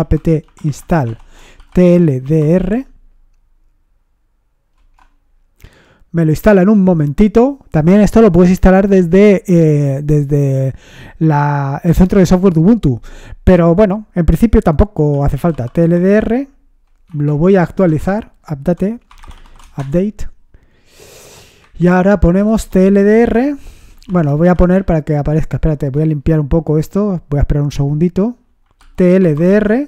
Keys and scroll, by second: 0.0-3.2 typing, 4.5-6.0 typing, 7.2 typing, 14.9-16.3 typing, 17.0 Up, 17.5-19.9 typing, 21.6 Up, 21.6-26.2 typing, 28.5-29.8 typing.